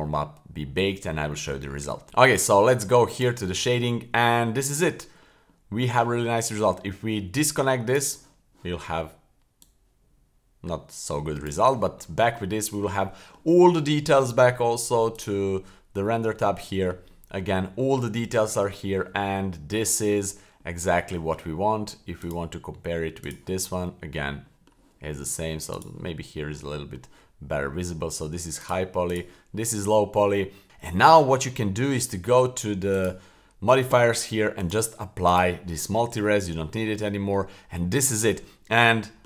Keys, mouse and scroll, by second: 2.0 click, 3.1 click, 3.8-4.2 middle drag, 4.5 shift+middle click, 5.0 middle click, 5.5 middle click, 7.4-8.0 drag, 9.6-11.5 drag, 12.1-12.4 middle drag, 12.6 middle drag, 13.1 middle drag, 13.6 middle drag, 14.0 middle click, 15.2 click, 16.6-17.0 middle drag, 17.1-17.4 middle drag, 17.7 middle drag, 18.4-18.8 middle drag, 19.0 middle drag, 19.9 middle drag, 20.6 middle drag, 22.2 click, 23.2 click, 23.9 middle drag, 24.5 middle drag, 25.8 click, 26.2-26.6 middle drag, 26.8 middle click, 28.6 click, 29.1 click, 29.6 middle drag, 30.0 middle click, 30.5-30.9 middle drag, 30.6 scroll up 2, 31.1 middle click, 31.5 middle drag, 31.9-32.7 scroll down 1, 32.9 click, 34.6-35.4 drag, 36.1 middle click, 36.3-36.8 scroll up 1, 36.8-37.3 middle drag, 37.4 scroll up 1, 37.6-38.3 middle drag, 38.3-38.9 scroll down 3, 38.9 middle drag.